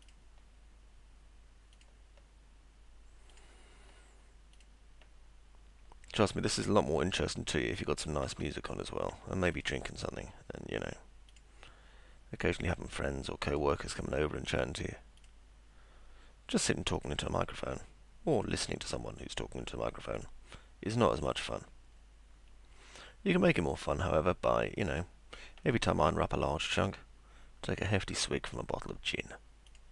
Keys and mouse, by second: 0.0 ctrl+click, 1.8 ctrl+click, 3.3 click, 4.6 click, 7.8 ctrl+click, 9.5 click, 11.3 click, 13.5 click, 15.2 click, 17.0 click, 18.4 click, 20.2 click, 21.3 click, 23.5 click, 24.8 click, 26.8 ctrl+click, 28.5 ctrl+click, 29.7 ctrl+click.